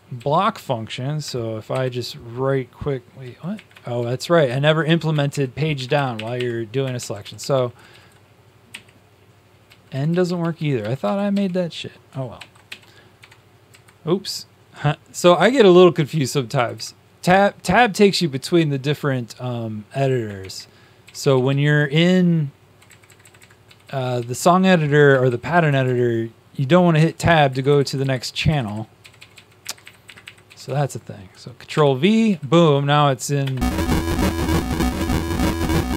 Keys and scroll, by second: 0.1 Right, 1.6 shift+Page_Down, 3.1 Down, 3.9 shift+Down, 4.4 shift+Up, 4.8 Page_Down, 6.1 shift+Up, 6.9 shift+Up, 6.9 shift+Down, 7.1 shift+Down, 7.3 shift+Down, 8.0 shift+Down, 8.7 shift+End, 9.6 shift+Down, 9.9 shift+Down, 10.7 shift+Down, 10.8 shift+Down, 11.3 shift+Down, 11.3 shift+Right, 12.3 ctrl+c, 12.6 Home, 13.1 Tab, 13.6 Left, 15.4 shift+Tab, 16.1 Right, 16.5 Left, 16.7 Left, 17.2 Right, 17.6 Tab, 20.3 shift+Tab, 20.9 Right, 21.1-22.8 Right, 22.8 Left, 23.0 Left, 23.2 Left, 23.3 Left, 23.6 Down, 23.8 Down, 24.0 Down, 24.2 Down, 25.0 Right, 25.2 Right, 25.6 Left, 25.9 Left, 26.9 Right, 27.5 Left, 27.6 Left, 27.8 Left, 27.9 Left, 28.4 Left, 28.6 Left, 29.0 Right, 29.1 Right, 29.4 Right, 30.0 Up, 30.4 Right, 30.6 Right, 31.7 ctrl+v, 32.2 Down, 32.4 Down.